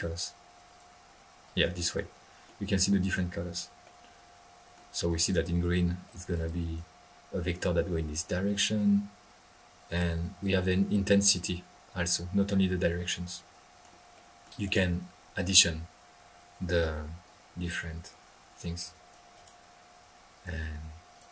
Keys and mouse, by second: 0.7 click, 1.4-1.9 drag, 1.9-2.6 middle drag, 2.7-3.2 drag, 3.8-4.9 middle drag, 5.1-5.5 drag, 6.1-6.4 right drag, 6.4-6.8 drag, 7.0-7.4 drag, 14.6 right drag, 16.7-17.1 drag, 17.2-19.3 drag, 19.3 right click, 20.3 click, 21.1 drag.